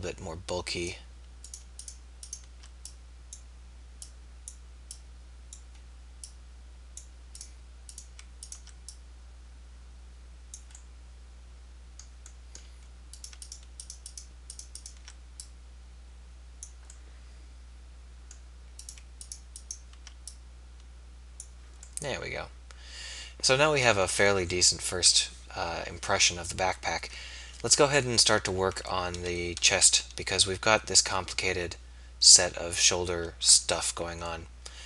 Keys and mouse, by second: 4.1 click, 17.2-18.4 middle drag, 22.1-23.1 middle drag, 25.0 KP_3, 26.8 KP_1, 29.7 z, 33.5 z.